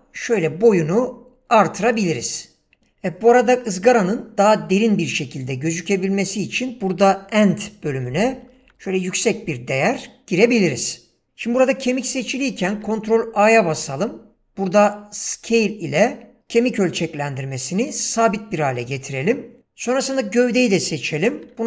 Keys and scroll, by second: 7.7-8.8 typing, 9.4 Return, 12.7 ctrl+a, 21.3 ctrl+a.